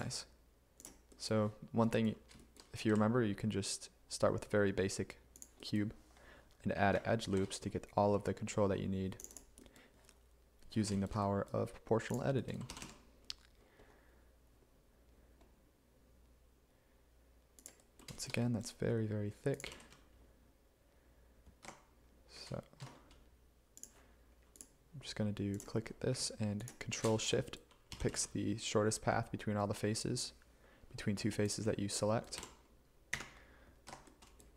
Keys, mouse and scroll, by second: 2.9 e, 7.4 ctrl+r, 12.7 g, 18.1 z, 19.7 g, 19.9 z, 21.7 Escape, 28.0 g, 32.4 g, 33.2 a, 33.9 Escape.